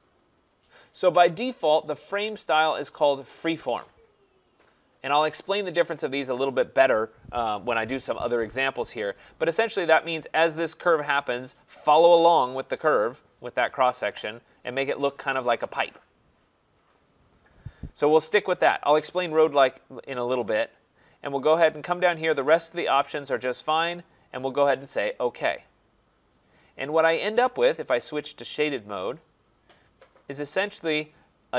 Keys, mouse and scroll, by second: 0.4 click, 25.7 click, 27.5-29.3 drag, 29.3-31.1 middle drag, 31.1 scroll up 1.